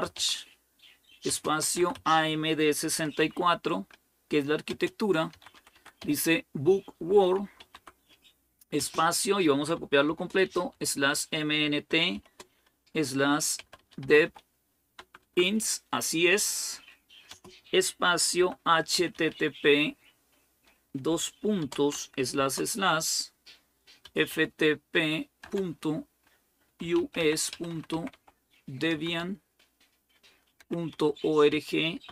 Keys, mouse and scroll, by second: 0.0-3.5 typing, 4.5-15.5 typing, 16.9-19.6 typing, 21.4-22.2 typing, 23.3-32.1 typing.